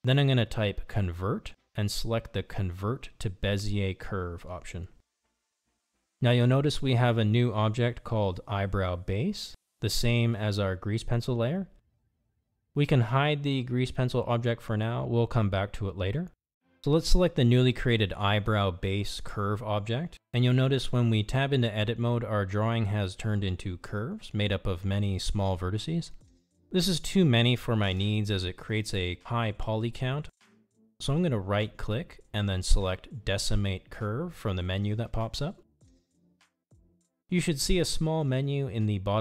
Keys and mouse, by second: 15.8 click, 16.9 click, 19.3 click, 24.9 Tab, 33.8-37.5 right drag.